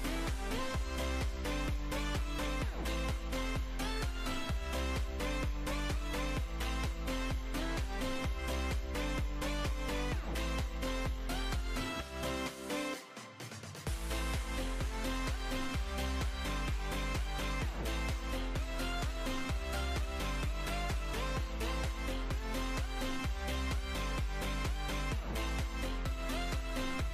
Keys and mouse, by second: 0.3-1.8 typing, 3.2-8.6 typing, 9.2 Tab, 10.0 Tab, 10.4-14.8 typing, 11.5 click, 15.8 Tab, 17.2 Tab, 17.4 KP_1, 19.2 click, 19.6 ctrl+z, 20.9 Tab, 22.6 click, 23.4 Tab, 25.5 Tab, 25.8 Tab, 26.2 KP_1, 26.4 z.